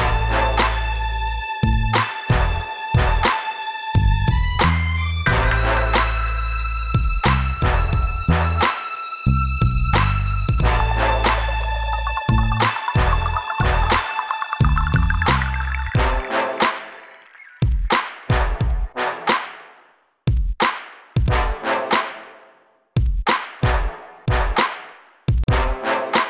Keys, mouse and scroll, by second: 1.3 click, 1.3 click, 2.4 click, 2.5 click, 5.2 click, 7.5 alt+Delete, 7.7 alt+Delete, 8.3 alt+Delete, 10.8 middle click, 11.8 middle click, 12.5 scroll up 1, 13.7 click, 14.6 click, 14.7 click, 14.8 click, 14.8 click, 16.0 click, 18.1 click, 18.4 double click, 19.8 click, 21.1 click, 21.7 scroll down 1, 24.9 click, 25.3 click, 25.4 double click.